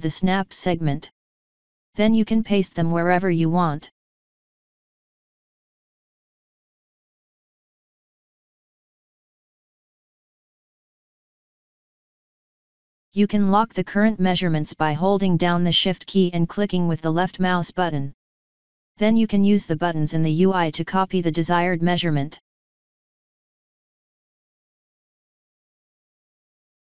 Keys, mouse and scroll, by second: 2.7 ctrl+click, 9.8 click, 10.9 click, 14.6 shift+click, 20.1 click, 23.3 click, 24.1 click, 26.5 click.